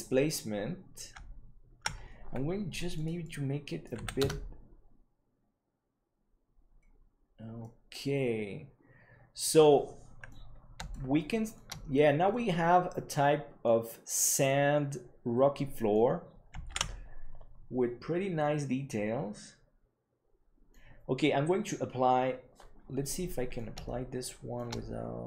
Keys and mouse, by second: 3.1-6.2 drag, 7.6-10.2 middle drag, 10.8-11.5 shift+middle drag, 12.3 middle click, 13.1 click, 13.5 middle click, 14.4-15.9 middle drag, 17.4 ctrl+s, 18.4-20.7 middle drag, 23.0 middle click, 23.8 shift+middle click.